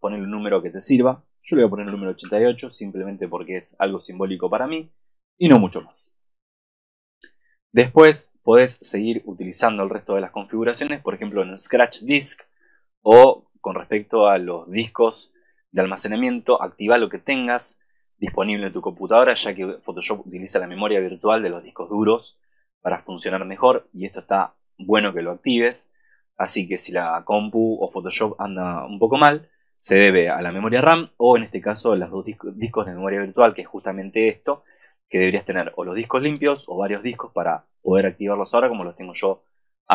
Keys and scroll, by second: 5.9 super+-.